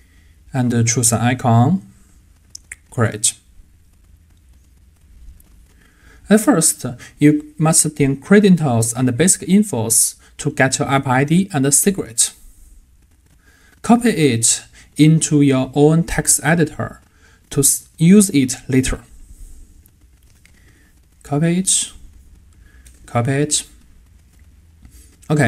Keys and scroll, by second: 20.7 super+v, 23.0 super+v.